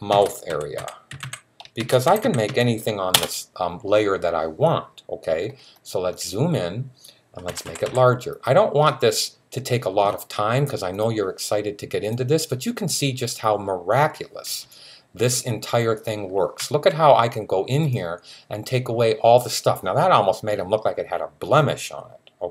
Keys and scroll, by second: 0.0-2.8 typing, 7.3-7.6 typing.